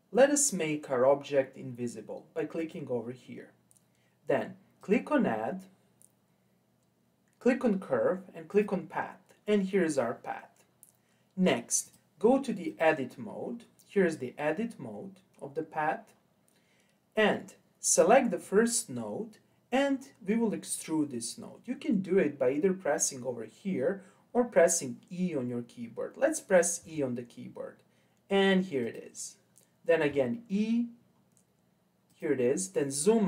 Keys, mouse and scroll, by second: 2.6 click, 4.8-8.0 drag, 9.4-11.8 scroll up 3, 11.8-13.6 drag, 13.6-14.4 scroll down 2, 14.4-14.9 scroll down 1, 14.9-15.4 scroll up 4, 15.4-15.8 scroll down 3, 17.8 click, 26.8 e, 30.1 e, 32.7-33.2 scroll down 6.